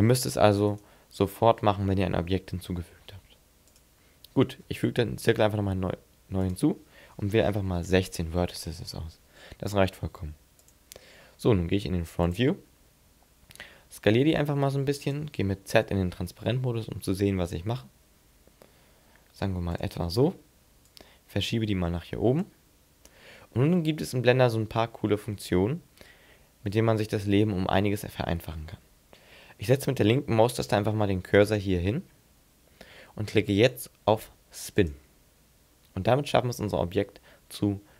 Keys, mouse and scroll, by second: 0.8 alt+right click, 3.0 x, 4.5 shift+a, 6.4 click, 13.3-13.8 scroll down 2, 14.2 s, 15.2 click, 15.7 z, 16.6 scroll down 2, 17.0-17.4 scroll up 4, 18.2 s, 19.8 click, 20.8 click, 31.5 click, 34.8 click.